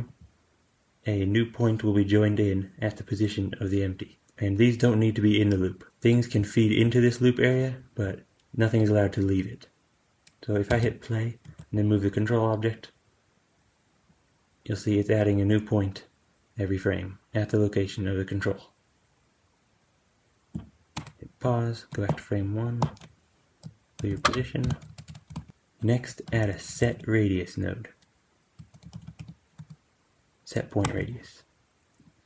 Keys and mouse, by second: 10.6 space, 11.3 g, 20.9 space, 22.7 shift+Left, 23.9 alt+g, 24.6 shift+Left, 24.8 space, 25.0 space, 25.2 shift+Left, 25.5-32.0 drag, 26.1 q.